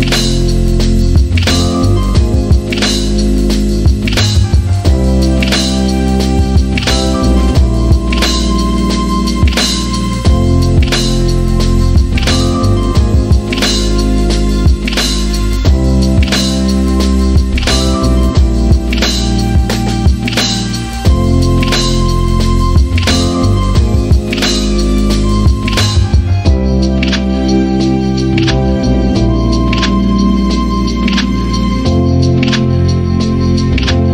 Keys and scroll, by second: 2.1-3.7 typing, 7.7 p, 7.9 Return, 9.2-10.0 typing, 13.2-14.5 typing, 16.1-17.9 typing, 20.1 x, 21.9-22.6 typing, 28.9 e.